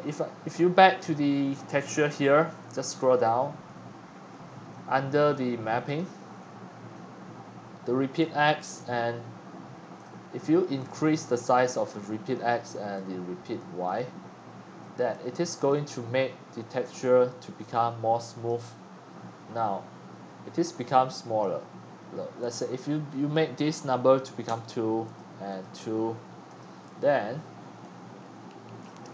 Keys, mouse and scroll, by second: 1.1 scroll up 1, 1.1 click, 1.9-2.3 drag, 2.3-3.3 scroll down 7, 3.3-3.8 middle drag, 5.8-6.2 drag, 5.9-7.6 scroll down 13, 7.6-8.8 scroll up 6, 8.8-9.9 drag, 10.8 click, 12.2-18.6 drag, 18.6-21.4 middle drag, 18.6 scroll, 21.4-24.4 drag, 24.4 2, 25.1 click, 26.6-29.1 drag.